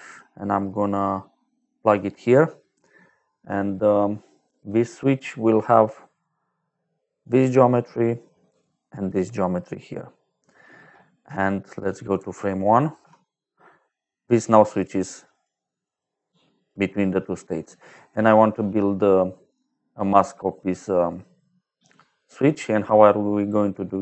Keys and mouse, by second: 0.0 click, 1.5 click, 6.1 click, 8.3 click, 12.1 shift+click, 15.2 click, 15.7 click, 16.1 click, 16.5 click, 17.4 middle click, 19.3 middle click, 21.7 middle click, 22.7 middle click, 23.9 middle click.